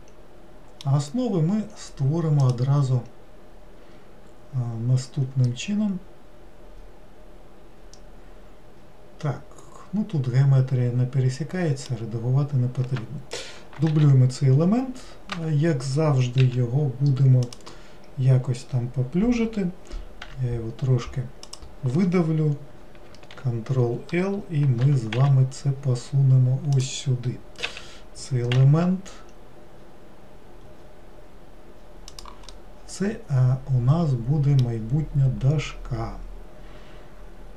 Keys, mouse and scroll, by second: 2.5 click, 5.5-8.6 middle drag, 14.0 shift+d, 16.5 s, 32.6-35.7 middle drag.